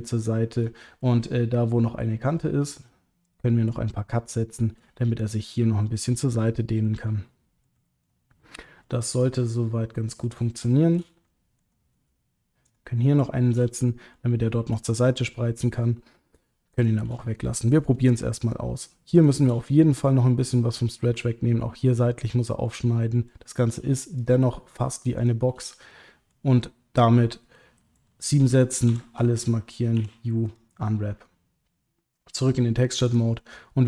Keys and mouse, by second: 1.0-2.7 middle drag, 3.2 shift+click, 4.3 shift+click, 6.9 middle click, 7.9 ctrl+middle click, 8.2 middle click, 8.8 middle click, 9.3 middle click, 10.7 shift+middle click, 11.2 ctrl+middle click, 13.8 middle click, 16.8 shift+click, 17.2 middle click, 18.4 shift+click, 19.2 shift+click, 19.5 middle click, 20.7 middle click, 22.7 middle click, 24.2 shift+click, 25.1 shift+click, 25.9 middle click, 28.9 a, 29.9 u, 32.4 click, 33.0 click, 33.3-33.8 middle drag.